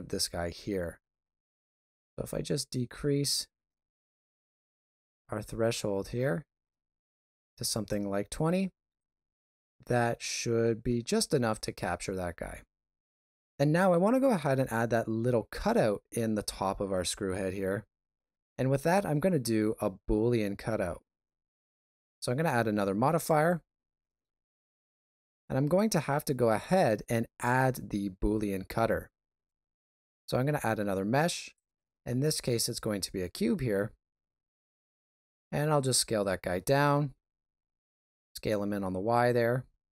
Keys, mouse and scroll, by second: 1.8 click, 8.9 middle click, 12.4 shift+z, 13.2 ctrl+middle click, 21.5 click, 29.3 shift+a, 32.8 s, 34.9 middle click, 36.5 s, 39.8 middle click.